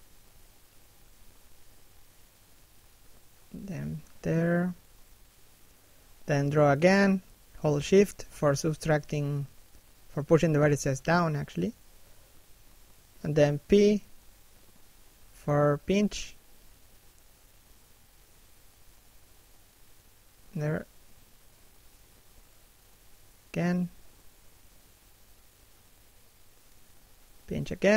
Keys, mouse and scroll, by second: 0.3 click, 1.8 shift+middle click, 2.1 click, 3.9 shift+middle click, 4.3 d, 5.1 shift+click, 7.3 shift+click, 8.7 shift+middle click, 9.3 shift+click, 10.7 shift+click, 11.9 shift+middle click, 12.6 p, 12.8 middle click, 13.2 scroll up 1, 13.6 shift+click, 15.3 p, 16.1 click, 17.3 p, 18.0 f, 18.4 click, 21.7 shift+middle click, 22.3 click, 23.4 shift+middle click, 23.8 f, 24.2 click, 24.8 shift+f, 25.5 click.